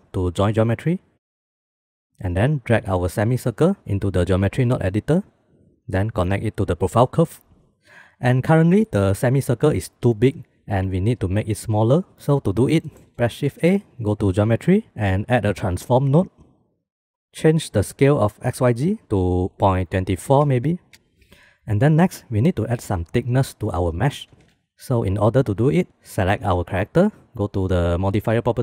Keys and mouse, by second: 0.6 click, 1.1 g, 1.7 middle click, 3.4-4.7 drag, 5.3 middle click, 5.5 middle click, 6.8 middle click, 13.1 shift+a, 17.4 click, 18.7-21.0 drag, 21.0 middle click, 24.8 ctrl+s.